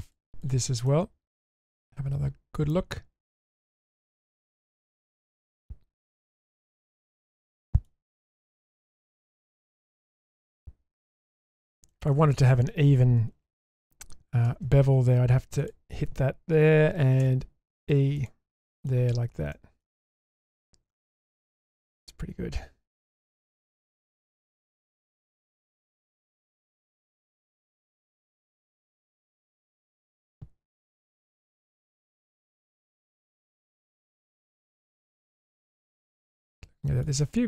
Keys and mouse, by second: 0.4 click, 0.9-4.6 middle drag, 4.9-5.2 shift+middle drag, 6.3-6.6 shift+middle drag, 6.9-7.9 middle drag, 8.1 shift+middle drag, 8.9 Tab, 9.4 Tab, 9.8-10.9 middle drag, 11.9 shift+middle click, 14.4 ctrl+r, 18.6 middle click, 19.0 Tab, 19.5 middle click, 20.2 Tab, 20.9-31.4 middle drag, 31.6-32.1 shift+middle drag, 32.3 middle click, 32.9 shift+middle drag, 33.4-37.0 middle drag.